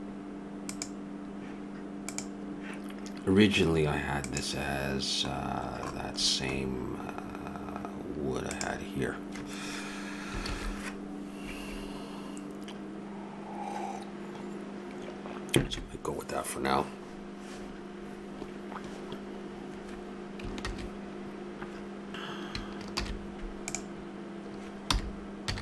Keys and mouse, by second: 2.1-7.0 right drag, 10.7 shift+z, 20.8 shift+z, 23.0 shift+g, 24.8 r.